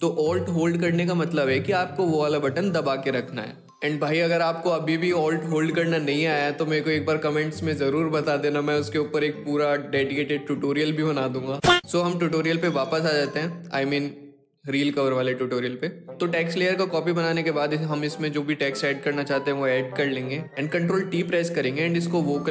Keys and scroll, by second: 20.6 ctrl+t.